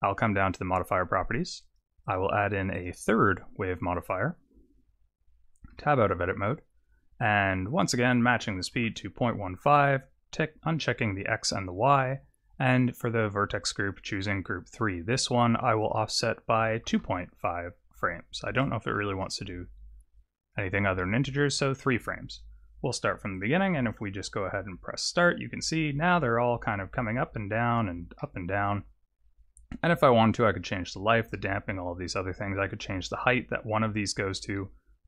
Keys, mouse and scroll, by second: 0.1 click, 1.6 click, 2.0 click, 2.7 click, 5.8 Tab, 7.7 click, 10.4 click, 11.4 click, 12.8 click, 15.8 click, 18.4 click, 22.3 click, 23.3 click, 24.0 click, 28.2 middle click, 33.1 click.